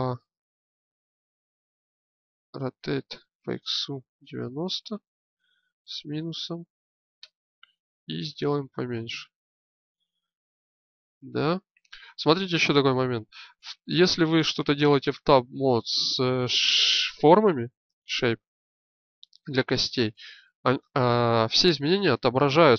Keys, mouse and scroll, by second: 2.1 a, 2.6 r, 8.3 s, 12.4-14.3 drag.